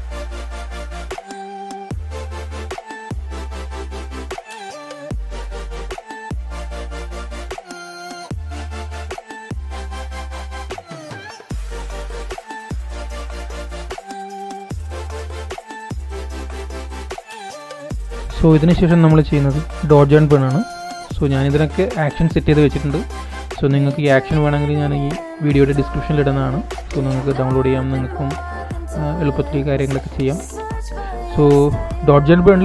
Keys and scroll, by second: 14.0 alt+shift+super+e.